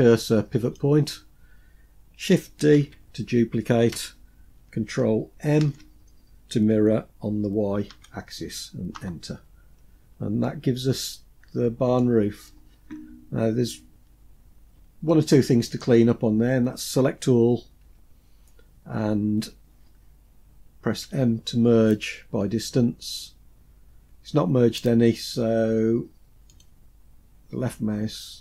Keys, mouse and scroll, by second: 2.2 shift+d, 5.0 ctrl+m, 9.2-9.8 scroll down 1, 9.8-11.4 middle drag, 9.8-10.4 scroll down 2, 13.7-14.2 scroll up 3, 14.5-15.2 shift+middle drag, 17.2 a, 20.4 m, 25.9 click.